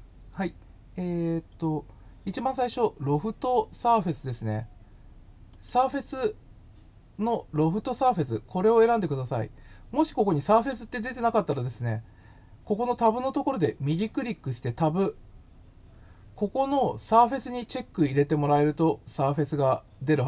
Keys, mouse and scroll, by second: 5.4 click, 10.5 right click, 13.4 right click.